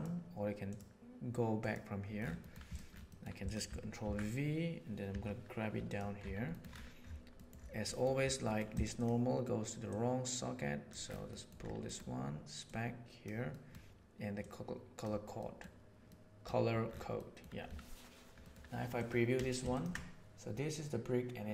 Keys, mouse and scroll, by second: 0.7 click, 1.1 right click, 3.0 middle click, 3.4 click, 3.9 ctrl+v, 5.0 g, 7.4 middle click, 7.8 middle click, 8.9 click, 9.8-10.9 drag, 11.3 middle click, 12.6 click, 13.5 middle click, 14.5 click, 15.4 middle click, 16.1 middle click, 17.2 middle click, 18.4 middle click, 19.7 ctrl+shift+click.